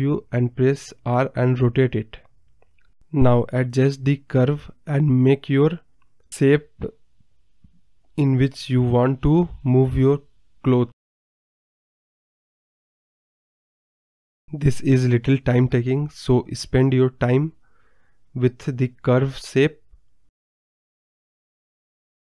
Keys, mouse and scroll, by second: 0.1-0.6 scroll down 4, 0.6 KP_7, 1.3 r, 2.9 KP_0, 3.4 scroll down 2, 3.9 g, 5.2 scroll down 3, 5.3-5.9 scroll up 3, 5.9 click, 6.6-8.0 drag, 8.0 g, 8.8 click, 9.3 e, 10.9 middle drag, 11.1 scroll down 1, 11.2-13.0 middle drag, 13.0 KP_0, 13.4 scroll up 2, 13.5-14.1 scroll down 8, 13.6 middle drag, 14.1-14.9 middle drag, 14.9 ctrl+z, 15.2-15.9 scroll up 2, 15.3 middle drag, 15.9-16.8 drag, 16.8 g, 17.9 KP_0, 18.8 g, 20.1 middle drag, 20.2 scroll down 5, 20.3 scroll up 1, 20.5-21.4 middle drag, 21.8 KP_0.